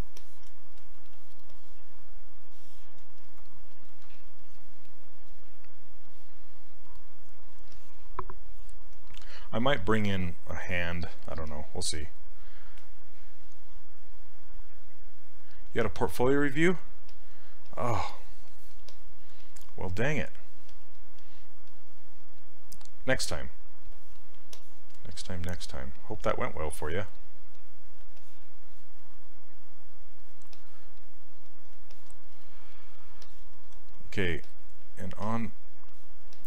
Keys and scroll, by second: 20.7 s, 35.3 s.